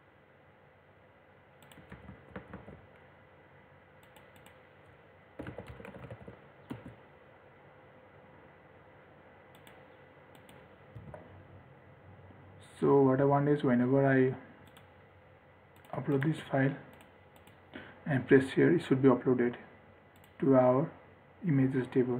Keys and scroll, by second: 2.2 ctrl+r, 11.3 ctrl+r.